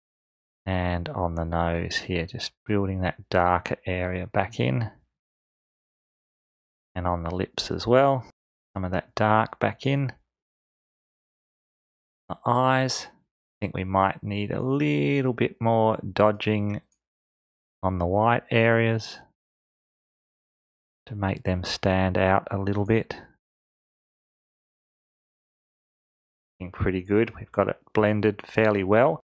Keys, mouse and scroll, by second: 12.4 click, 26.4-29.2 drag.